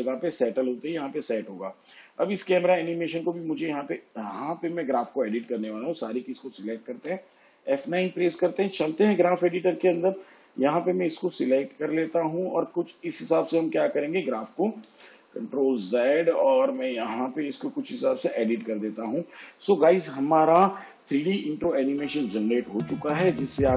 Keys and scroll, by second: 7.6 F9, 15.5 ctrl+z.